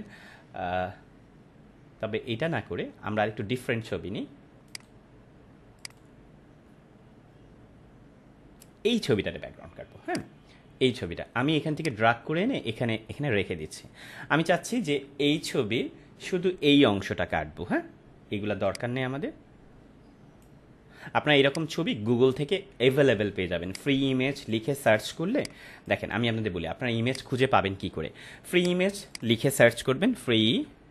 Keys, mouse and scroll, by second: 4.7 right click, 5.8 click, 10.0 click, 10.2-13.3 drag, 14.8 ctrl+=, 18.6-20.5 drag, 29.9-30.9 typing.